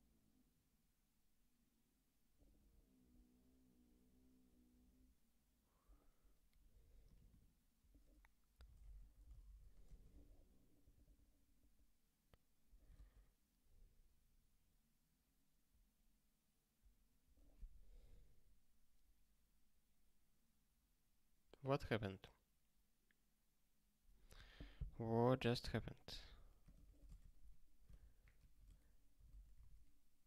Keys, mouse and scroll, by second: 12.9 ctrl+k, 24.8 scroll down 1, 26.6 click, 26.8 ctrl+a, 27.2 ctrl+alt+@, 28.0 ctrl+alt+@, 28.3 alt+;, 29.3 ctrl+s, 29.9 ctrl+k.